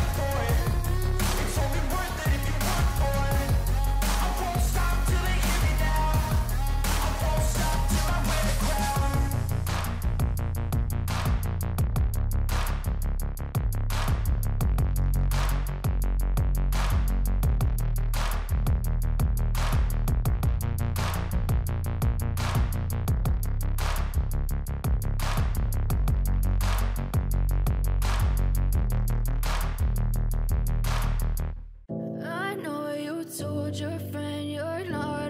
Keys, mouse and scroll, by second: 1.5 double click, 1.8 double click, 2.1 double click, 2.3 double click, 2.6 double click, 2.8 double click, 3.1 double click, 3.4 double click, 3.7 double click, 4.1 double click, 4.4 double click, 4.8 double click, 5.2 double click, 5.6 double click, 6.1 double click, 6.5 double click, 7.0 double click, 7.5 double click, 7.9 double click, 8.3 double click, 8.6 double click, 8.9 double click, 9.4 double click, 9.7 double click, 10.0 double click, 10.2 double click, 10.5 double click, 10.8 double click, 11.0 double click, 11.4 double click, 11.6 double click, 13.4 double click, 13.6 double click, 13.9 double click, 14.2 double click, 14.5 double click, 14.7 double click, 15.0 double click, 15.3 double click, 15.5 double click, 15.8 double click, 16.0 double click, 16.2 double click, 16.5 double click, 16.8 double click, 17.0 double click, 17.3 double click, 17.5 double click, 17.7 double click, 18.0 double click, 18.2 double click, 18.5 double click, 18.7 double click, 19.0 double click, 19.3 double click, 19.5 double click, 19.9 double click, 20.1 double click, 20.4 double click, 20.6 double click, 20.9 double click, 21.2 double click, 21.4 double click, 21.6 double click, 23.3-24.8 scroll down 7, 24.8 scroll down 1.